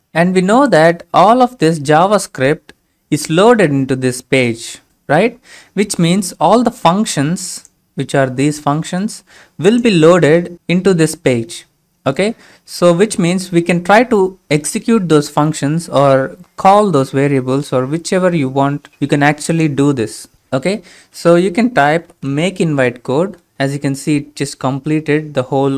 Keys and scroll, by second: 21.9-22.9 typing.